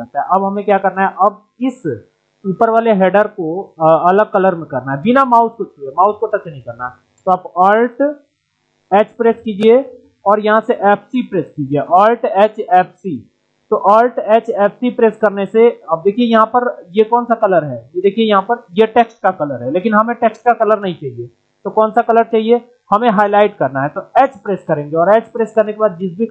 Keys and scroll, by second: 24.1 alt+h.